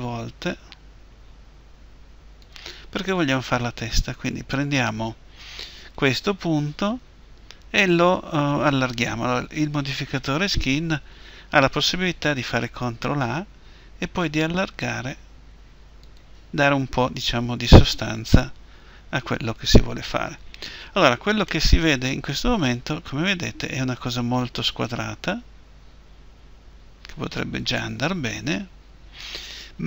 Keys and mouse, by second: 2.5-5.8 drag, 5.8-10.4 right drag, 12.8 ctrl+a, 16.2-18.1 drag, 22.0-23.4 middle drag.